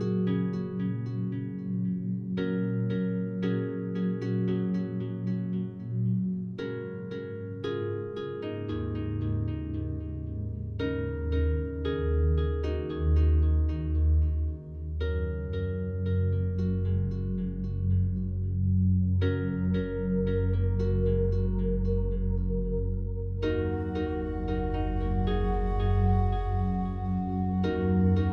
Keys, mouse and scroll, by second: 0.6 ctrl+z, 3.3 alt+click, 4.3 right click, 5.4 shift+right click, 9.2 click, 10.8 a, 11.0 a, 12.2-12.9 scroll up 1, 13.2-19.1 alt+drag, 19.1 right click, 23.0 ctrl+r.